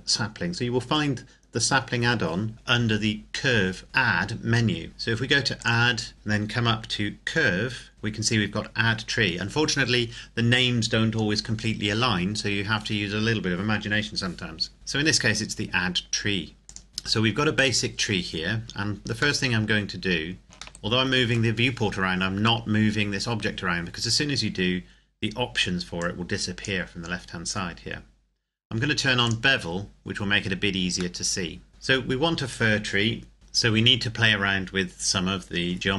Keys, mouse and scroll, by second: 3.8 click, 5.5 click, 16.6 click, 16.9-17.5 scroll up 1, 17.5 right click, 18.1 scroll up 1, 18.4-19.4 scroll down 1, 19.4 middle click, 20.4-20.8 scroll up 1, 20.8 shift+middle click, 26.0 click, 29.3 click, 30.1-31.1 scroll up 1, 31.1 middle click, 31.7-32.7 scroll down 1, 33.3 scroll down 1.